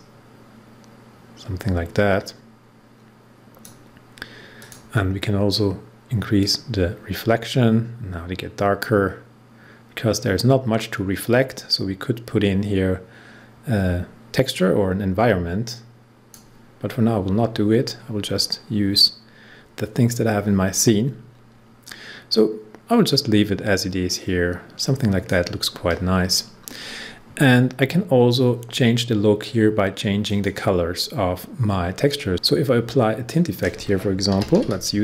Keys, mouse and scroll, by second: 6.3-8.3 drag, 17.7-18.2 scroll down 1, 18.5 scroll up 1, 21.8-26.4 drag, 26.4 scroll down 1, 30.2 click, 33.2 click, 34.0-35.0 typing.